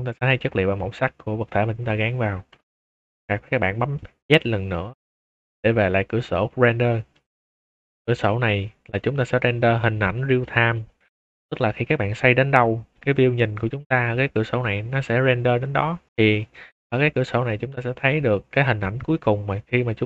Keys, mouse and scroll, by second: 2.4 click, 3.1 z, 3.9 click, 4.2 z, 7.1 click, 8.9-9.6 middle drag, 9.7 shift+middle drag, 10.1 middle drag, 10.4-10.7 middle drag, 10.9 shift+middle click, 10.9 shift+middle drag, 11.5 middle click, 11.8-12.9 middle drag, 16.1 middle click, 16.3-16.7 middle drag, 16.9 shift+middle drag, 17.3 middle click, 17.6-18.8 middle drag.